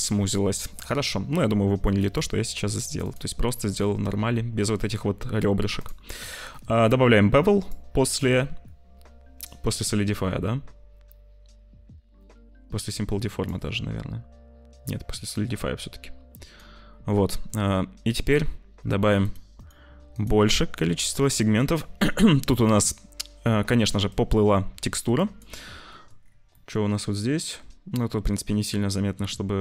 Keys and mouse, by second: 2.9-5.8 drag, 7.6-13.4 drag, 15.2-16.5 drag, 19.6 click, 20.0 click, 24.0-25.3 shift+drag, 25.9 click, 26.5 click.